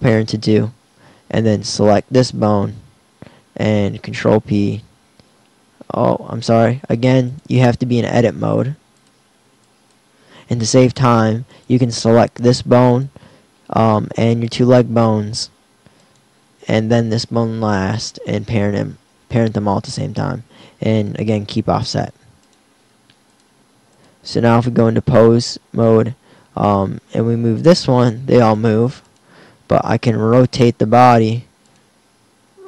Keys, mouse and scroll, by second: 3.9 ctrl+p, 9.0 click, 17.9 ctrl+p, 23.3 click, 27.0 g, 30.2 r, 32.4 KP_1.